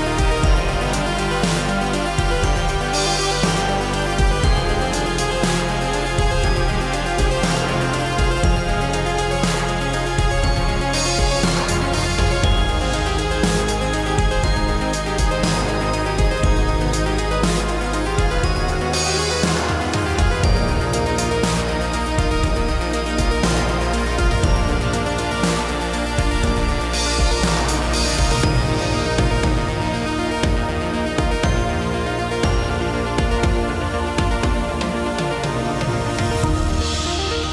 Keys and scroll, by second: 22.6 ctrl+c, 24.9 ctrl+v.